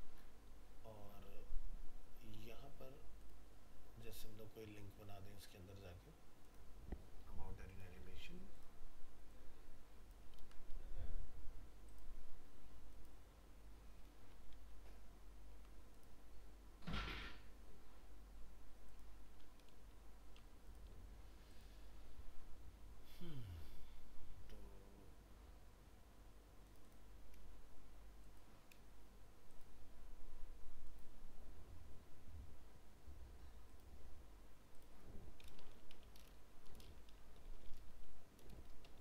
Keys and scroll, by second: 10.4 ctrl+c, 13.9 ctrl+a, 14.5 ctrl+v, 19.4 ctrl+a.